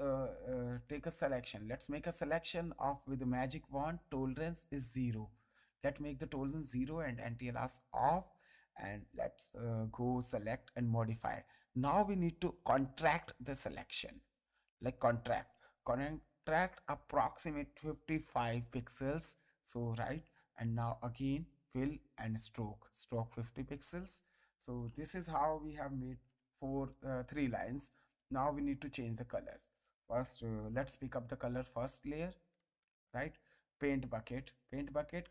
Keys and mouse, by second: 1.2 click, 1.8 ctrl+d, 2.2 click, 7.7 click, 10.7 click, 14.9 click, 18.2 KP_5, 18.9 Return, 18.9 KP_Enter, 20.8 click, 22.2 click, 23.4 click, 24.8 ctrl+d, 26.9 space, 27.5 ctrl+click, 30.6 g, 31.8 alt+click, 32.9 ctrl+Tab.